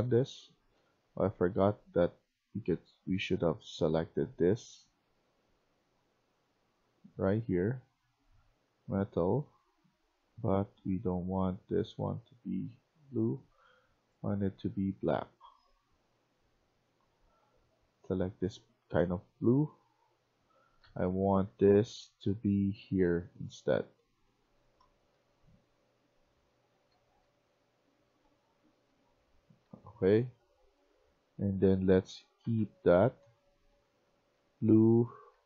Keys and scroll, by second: 0.0-0.6 typing, 18.5-22.9 typing, 24.7-29.9 typing, 31.1-35.4 typing.